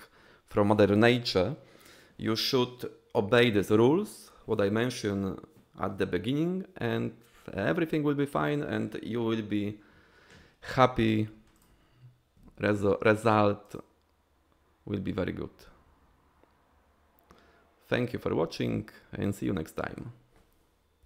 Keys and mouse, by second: 13.6 click.